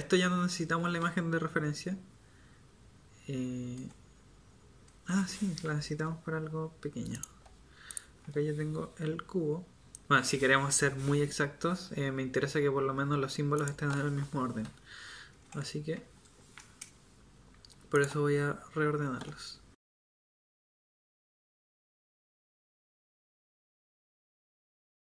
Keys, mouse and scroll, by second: 3.7 KP_1, 4.9 KP_3, 9.4 g, 14.6 KP_7, 15.3 KP_1, 15.8 KP_7, 19.8 g, 20.4 KP_1, 21.3 g, 21.5 r, 23.6-25.0 typing.